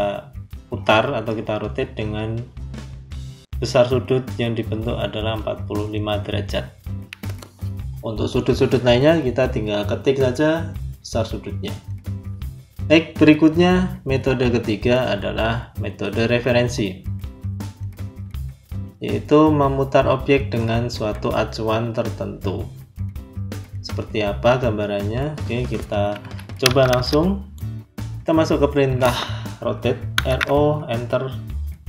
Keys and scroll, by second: 26.1 z, 26.5 space, 27.9 Escape, 30.0 r, 30.3 o.